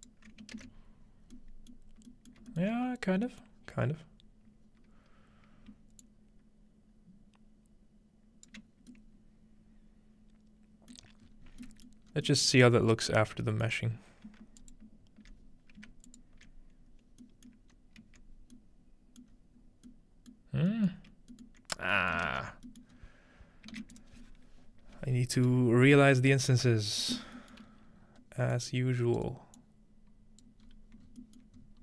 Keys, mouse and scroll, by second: 0.6 ctrl+alt+space, 1.4 middle click, 1.9-4.8 scroll up 3, 3.3 alt+middle click, 3.5 alt+middle click, 3.6 alt+middle click, 4.8-5.1 scroll up 1, 6.0-10.2 shift+drag, 11.1-12.3 middle drag, 11.2-12.1 scroll down 1, 12.1 scroll up 1, 12.5 middle click, 12.7 scroll up 1, 13.1-13.5 middle drag, 13.7 middle click, 13.9-14.6 scroll up 2, 14.6 alt+shift+click, 16.1 alt+shift+click, 17.2-18.6 middle drag, 17.7 scroll up 1, 18.0 z, 22.3 ctrl+space, 22.5-22.9 scroll down 1, 22.9 scroll up 1, 23.4-24.0 ctrl+shift+middle drag, 23.8 shift+a, 24.0-25.6 drag, 25.4 right click, 25.7 scroll down 2, 26.0-26.6 scroll up 3, 27.1-28.5 scroll down 4, 28.5-29.3 drag, 29.0 right click, 29.6-30.6 right drag, 30.6-31.7 scroll up 3, 31.2 middle click.